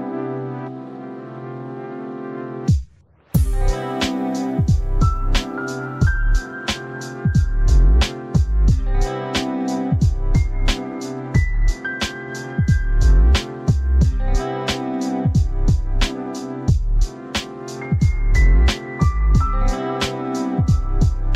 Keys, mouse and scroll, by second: 8.5 click, 9.8 click, 15.9 click, 18.6 click.